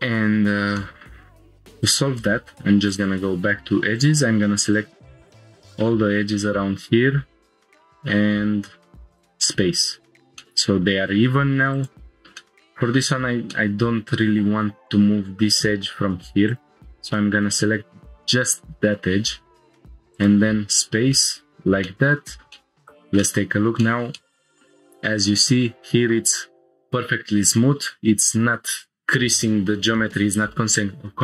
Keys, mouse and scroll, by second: 0.3 scroll down 1, 0.8 shift+middle click, 1.3 middle click, 1.8 click, 2.5 2, 2.9 click, 3.9 ctrl+click, 4.7 shift+click, 5.3-7.2 middle drag, 7.7 right click, 10.4-11.2 middle drag, 11.7 click, 12.4-13.0 middle drag, 13.5-13.9 middle drag, 16.5 ctrl+click, 17.1 right click, 20.8 scroll down 2, 21.1-21.4 middle drag, 21.5 Tab, 21.8-22.5 middle drag, 22.6 shift+middle click, 22.8 click, 23.2-23.7 middle drag, 23.8 shift+middle drag, 24.1-24.6 middle drag.